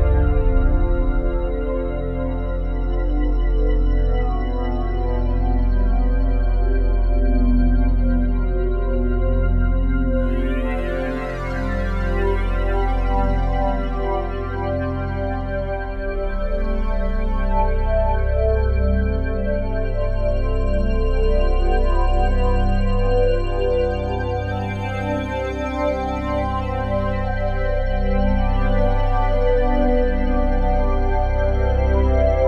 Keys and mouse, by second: 0.5 click, 0.7 click, 2.0-5.1 typing, 6.1-6.5 typing, 8.3-10.4 typing, 13.1 click, 14.9 Tab, 16.0-16.4 typing, 18.6 click, 19.1 typing, 21.1 click, 21.8 typing, 23.0 click, 23.8 Tab, 24.4-25.6 alt+drag, 24.6 typing, 25.9 ctrl+alt+click, 26.5 alt+click, 26.9 typing, 27.5 click, 28.8-29.5 typing, 30.4 ctrl+alt+click, 31.2 alt+shift+click.